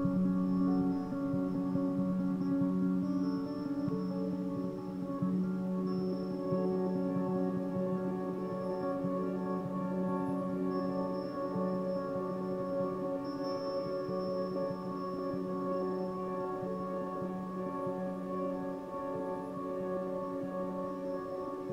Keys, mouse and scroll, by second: 0.1-0.5 scroll up 1, 0.5-0.9 shift+middle drag, 0.9 scroll up 1, 1.0-1.9 middle drag, 1.9 click, 3.0 shift+click, 3.6 x, 4.2 click, 4.7 shift+click, 5.4 click, 5.9 shift+click, 6.5 x, 7.0-9.4 middle drag, 9.4 scroll down 1, 9.6-11.6 middle drag, 11.6 scroll up 2, 12.1-13.2 shift+middle drag, 13.2-13.9 scroll down 1, 13.9 z, 14.6 b, 15.5 z, 15.7 scroll down 4, 16.4 KP_7, 18.3 KP_1, 18.9-19.3 scroll up 7, 19.7-20.1 scroll down 5, 20.5 g, 21.6 a.